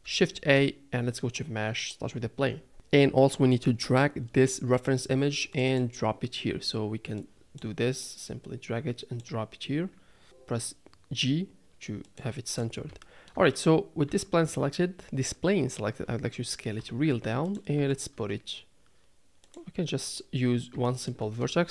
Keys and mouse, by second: 0.3 shift+a, 10.2 g, 13.0 shift+middle drag, 14.1 Tab, 16.8 s, 17.8 g, 20.8 shift+middle click.